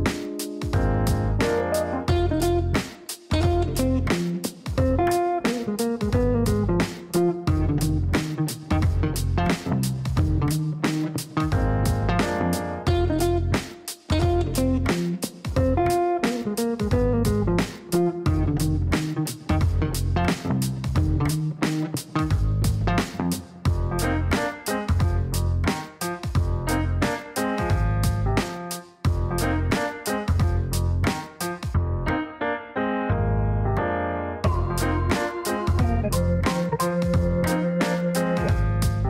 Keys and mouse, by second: 1.0-2.0 typing, 2.0 Down, 5.3 KP_Divide, 5.7 KP_2, 7.4-10.5 typing, 7.6 KP_Add, 11.5 Down, 12.5 Return, 14.1 click, 15.2 click, 17.0 click, 17.6 click, 19.4 click, 20.4-22.8 typing, 22.8 Down, 23.1 Return, 23.5 Return, 24.8 click, 27.3 click, 27.8 click, 29.7 click, 30.6-33.2 typing, 33.2 Down, 33.4 Down, 33.6 Down, 34.3 Down, 34.5 Down, 34.8 Return, 35.3 Return, 36.7 click, 38.7 click.